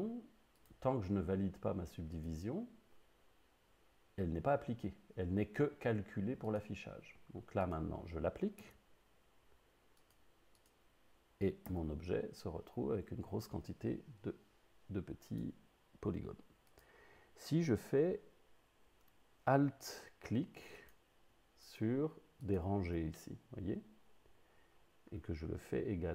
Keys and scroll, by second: 8.6 Tab, 11.7 Tab.